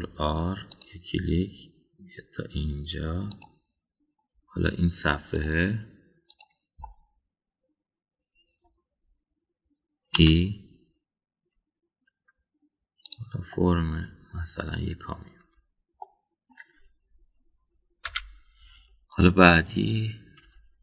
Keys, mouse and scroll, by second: 0.6 ctrl+r, 6.4 click, 7.3 click, 7.9-9.7 middle drag, 11.2 e, 14.5-15.4 middle drag, 16.4 Tab, 17.0 middle click, 19.1 /, 20.1 click.